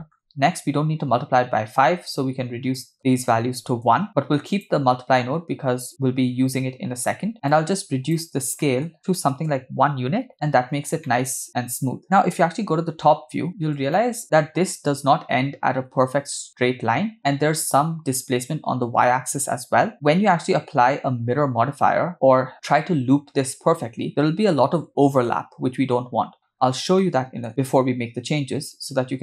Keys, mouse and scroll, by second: 2.8-3.8 shift+drag, 4.5 click, 7.5 click, 8.6 middle click, 8.9-9.4 drag, 8.9 scroll up 3, 11.1-12.0 middle drag, 12.8 KP_7, 13.4 scroll down 2, 14.0 shift+middle drag, 14.2 scroll up 5, 20.4-21.2 scroll down 6, 21.5 scroll up 2, 22.1-22.5 middle drag, 22.1 scroll down 1, 26.6-27.0 scroll down 2, 27.0 middle click, 28.7 click.